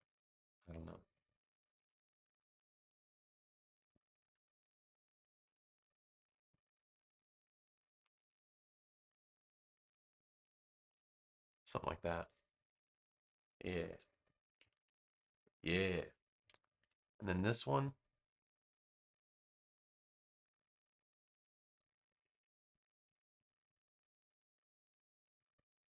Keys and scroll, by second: 14.4 space, 16.7 super+v.